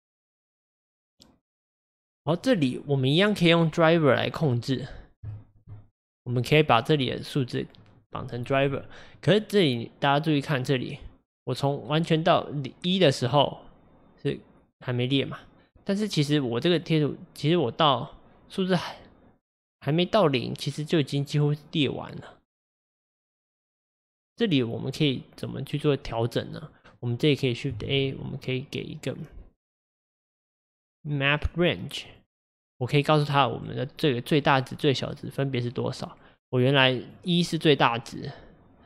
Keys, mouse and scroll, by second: 5.8-6.2 scroll up 3, 10.4-18.2 drag, 27.0-32.1 drag, 35.4-38.8 drag.